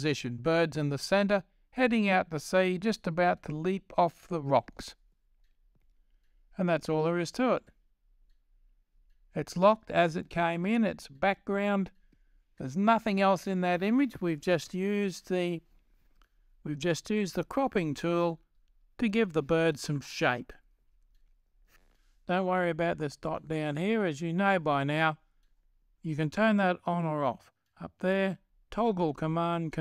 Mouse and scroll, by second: 23.4-24.7 drag, 24.9-25.9 drag.